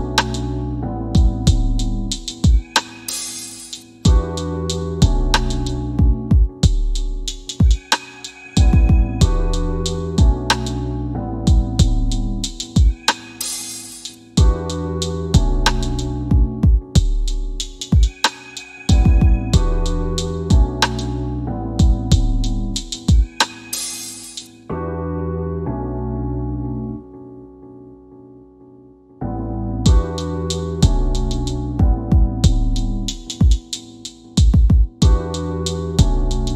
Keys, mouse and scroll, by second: 1.3 right click, 2.5 click, 6.3 click, 10.8 KP_8, 12.1 click, 19.2 KP_4, 21.7 click, 22.7 KP_Decimal, 24.6 click, 25.5 KP_3, 26.9 click, 35.5 click.